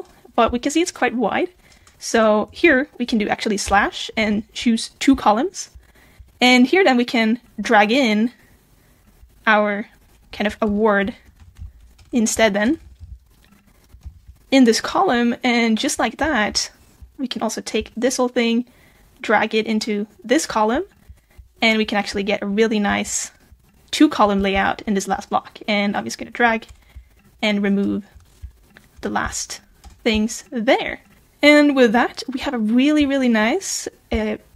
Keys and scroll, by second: 14.0 super+b.